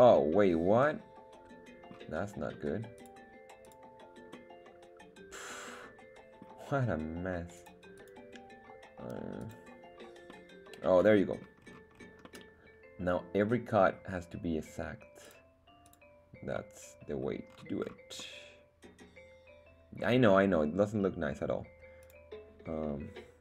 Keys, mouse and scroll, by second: 3.3 click, 3.9 click, 4.3-6.7 middle drag, 7.5 click, 8.1 click, 10.3-11.5 middle drag, 11.7-12.6 scroll down 3, 12.6-14.1 middle drag, 15.3 click, 15.9 click, 16.8 middle click, 17.5-18.4 scroll up 4, 18.4-20.2 middle drag, 22.4-23.4 drag.